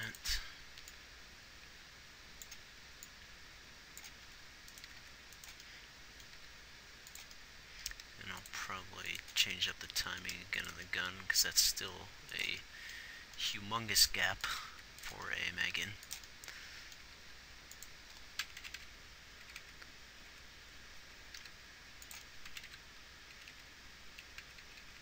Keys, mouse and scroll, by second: 4.7 r, 5.2 r, 6.8 g, 8.4 g, 9.2 r, 10.7 g, 12.0 g, 14.4 r, 15.0 r, 16.1 g, 17.5 g, 19.1 Right, 19.2 Right, 20.1 Left, 21.3 Left, 21.8 g, 22.9 Right, 23.2 Right, 23.8 Left, 24.0 Left, 24.8 Left.